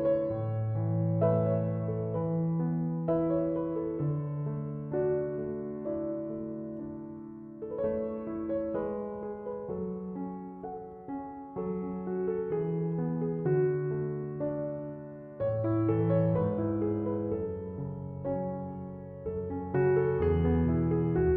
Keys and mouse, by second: 8.6 click, 15.0 click, 17.4 click.